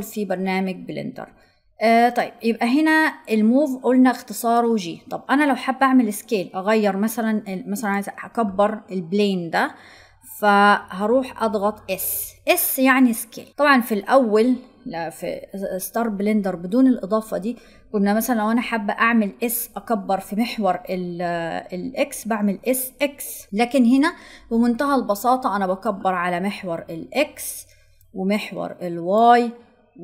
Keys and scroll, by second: 11.8 s.